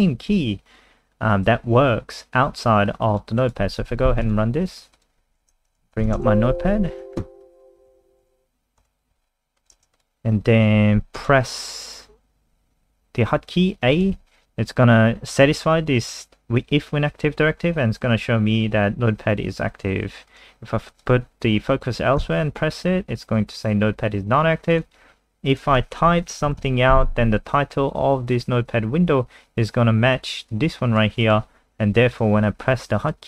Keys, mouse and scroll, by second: 5.4-8.3 typing, 8.8 Return, 9.6 click, 9.7 ctrl+alt+space, 11.2 click, 14.2 a, 20.3 click, 22.2 a, 24.7 click, 25.9-27.1 typing, 30.5 click.